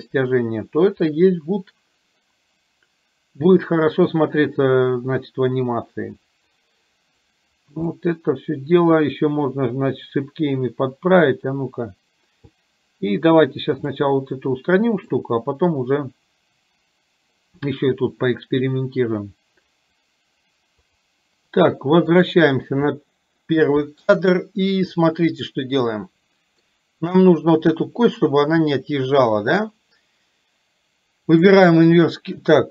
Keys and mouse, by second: 5.7-7.3 drag, 8.1-8.8 middle drag, 14.1-15.2 middle drag, 22.3 click, 23.1-23.6 shift+middle drag, 24.3-26.8 middle drag, 31.4 click.